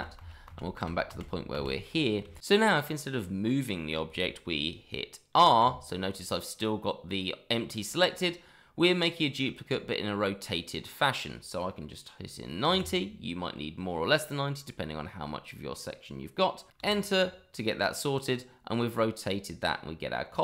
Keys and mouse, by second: 2.2 shift+middle click, 5.6 r, 12.6 KP_9, 12.7 KP_0, 16.8 Return.